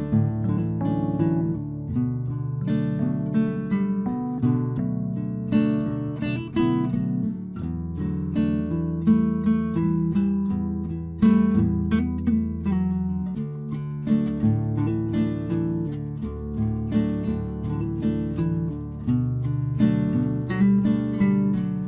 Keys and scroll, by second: 4.3 ctrl+t, 7.0 Return.